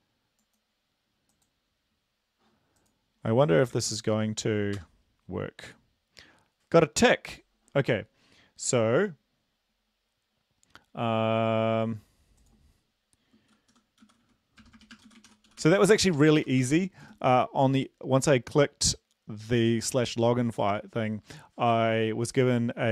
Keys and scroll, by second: 3.7 ctrl+v, 4.7 Return, 14.0-17.0 typing, 16.1 Left, 16.6 End.